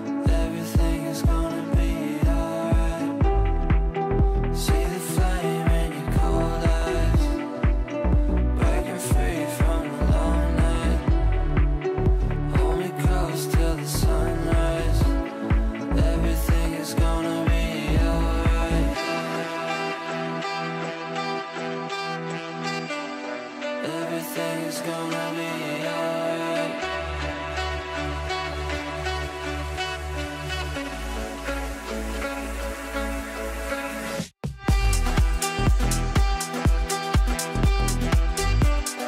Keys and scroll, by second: 26.2 t.